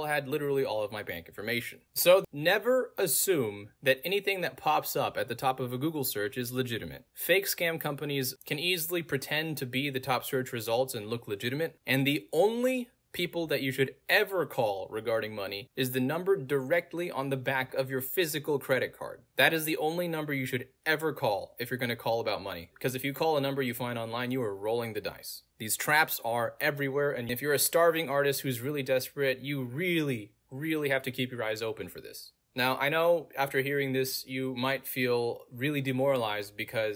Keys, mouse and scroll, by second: 3.6-4.1 scroll down 1, 4.3 middle click, 4.3 scroll down 2, 4.4-5.0 scroll up 2, 5.0 middle click, 5.0-5.7 scroll up 2, 5.7-6.5 scroll up 1, 11.2 scroll up 2, 11.3-12.1 scroll down 2, 12.1 scroll down 2, 13.2 scroll down 2, 13.2-13.5 scroll up 3, 13.8 click, 17.1 click, 21.0 scroll down 2, 21.5 click, 24.1 middle click, 24.2-24.6 scroll down 1, 25.0 click, 26.2 click, 27.6 click, 28.2 middle click, 28.2 scroll down 1, 29.9 click, 32.4 middle click, 32.4 scroll down 2, 34.8 click, 35.4 click.